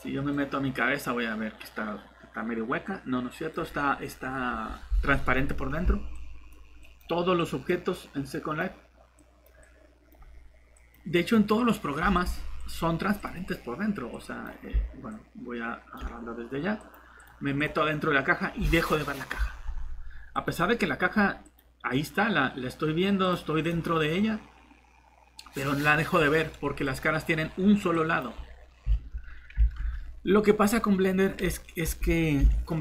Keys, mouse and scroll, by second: 3.5 click, 5.3-6.9 typing, 5.4 scroll down 1, 6.1 click, 14.3-15.4 typing, 20.3 click, 20.9 right click, 21.4 click, 28.4 scroll down 1, 29.0 alt+Tab, 29.8 Tab, 30.7 middle click.